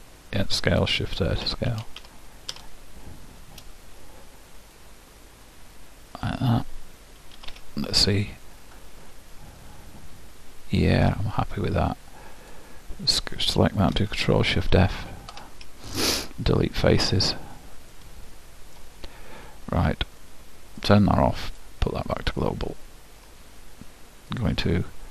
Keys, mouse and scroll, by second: 1.5 s, 7.5 z, 8.2-9.8 middle drag, 12.5-14.2 drag, 16.2 ctrl+alt+shift+Delete, 17.5-18.6 middle drag, 20.8-23.4 drag, 24.4-25.1 drag.